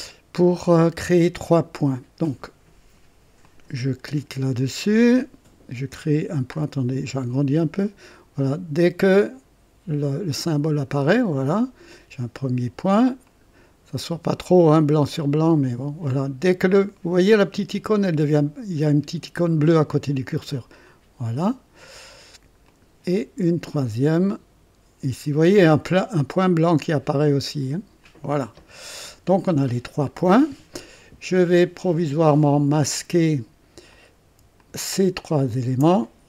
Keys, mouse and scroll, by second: 3.4 click, 6.5-6.8 scroll up 2, 7.1 right click, 10.7 click, 13.3 click, 20.8 click, 22.6 click, 28.0 click, 33.9 click, 34.6 ctrl+click, 35.5 ctrl+click.